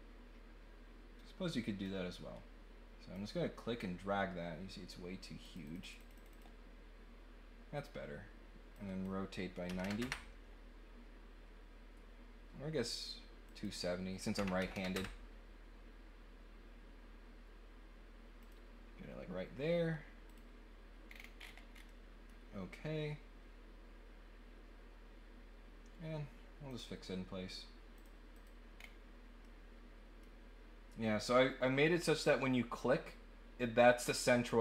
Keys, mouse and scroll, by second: 1.8-3.1 drag, 5.4 click, 5.6 click, 5.8 click, 6.0 click, 8.7 click, 13.4 click, 18.4 click, 20.3 click, 21.1 scroll down 1, 21.3-21.8 scroll up 2, 21.8 middle click, 26.6 click, 27.9 click, 28.3 click, 28.7 scroll down 1, 29.4-30.1 scroll up 1.